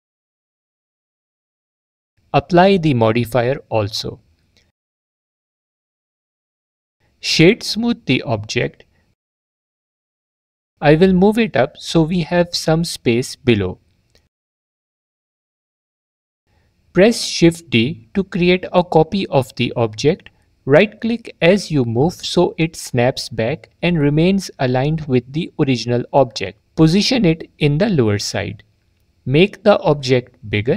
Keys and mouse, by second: 3.4 click, 4.6-5.8 drag, 8.0-9.8 drag, 13.4 click, 17.5 shift+d, 18.4 click, 22.5 s, 23.3 click, 25.4 click, 28.0-29.5 drag, 29.5 s, 30.4-30.7 drag.